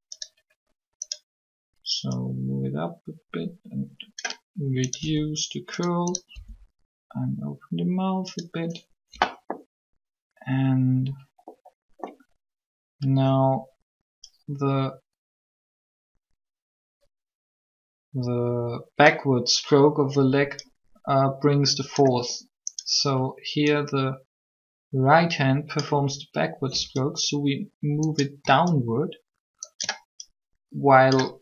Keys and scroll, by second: 5.0 r, 6.3 r.